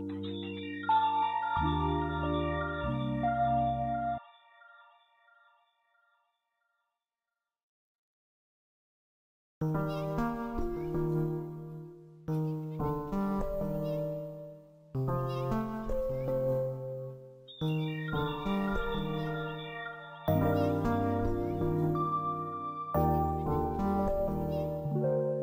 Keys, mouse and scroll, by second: 2.2-8.1 drag, 8.1 Down, 8.8 click, 11.9 click, 12.7 F3, 16.2-19.3 drag, 19.5 F2, 19.9-24.9 drag.